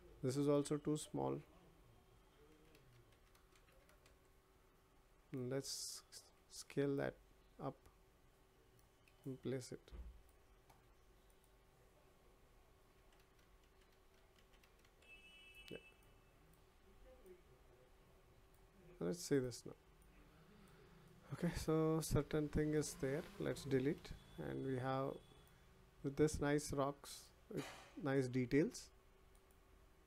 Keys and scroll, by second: 23.9 Delete.